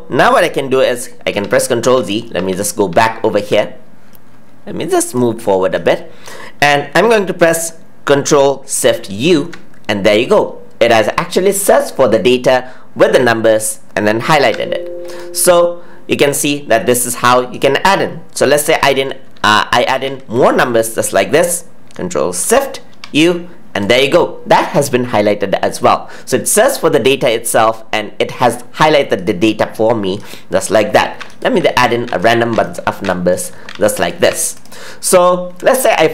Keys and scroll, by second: 0.7 ctrl+z, 14.3 ctrl+z.